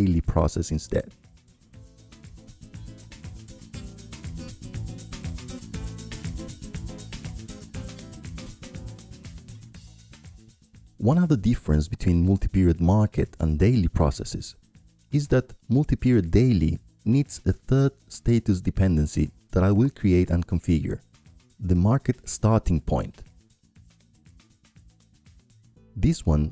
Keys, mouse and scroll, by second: 2.7-3.8 drag, 4.0-5.5 ctrl+drag, 4.3 ctrl+Left, 5.5-7.8 middle drag, 9.1-10.1 drag, 14.7 click, 16.2-19.2 drag, 20.6-21.7 drag, 23.9-25.0 drag, 26.3 click.